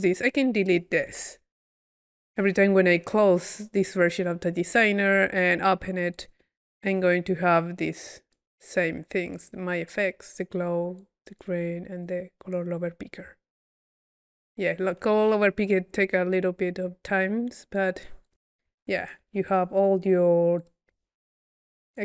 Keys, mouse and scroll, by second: 0.2-1.9 right drag, 1.7 Delete, 2.0 right click, 6.2-7.1 drag, 7.9 click, 9.3-9.7 drag, 9.9 click, 11.0 click, 12.1-16.8 drag, 16.9 click, 17.8 click, 18.8 Delete, 19.0-20.0 drag, 20.2 click, 20.3 drag, 20.6-21.7 drag, 21.5 Delete, 21.9 click.